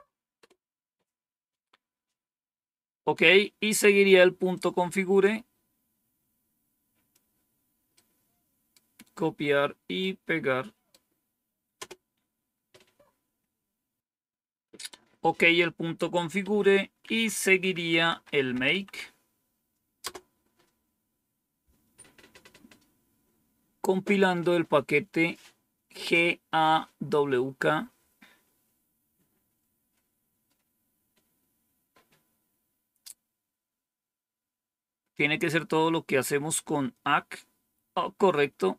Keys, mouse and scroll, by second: 0.3 Return, 4.4-7.1 drag, 7.9 right click, 9.9 right click, 11.7 Return, 16.4 Up, 17.0 Down, 17.6-19.2 typing, 19.9 Return, 32.8-34.4 scroll down 2, 34.6-35.9 scroll down 3, 36.2-36.9 scroll down 2.